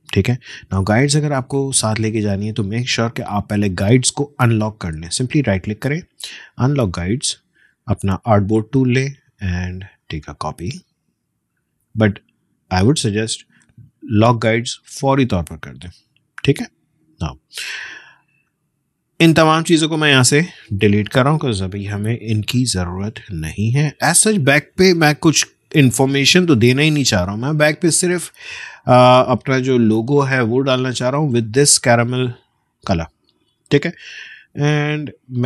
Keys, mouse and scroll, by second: 0.7 ctrl+shift+z, 2.6 shift+click, 5.5 shift+right click, 6.7-12.3 shift+drag, 12.3 right click, 14.8 click, 18.1-18.5 alt+scroll up 1, 20.9 click, 22.0 BackSpace, 23.4 click, 24.4 BackSpace, 25.2 click, 25.5 BackSpace, 26.1 click, 26.6 BackSpace, 27.7 click, 33.8 space, 34.0 click, 34.3 space.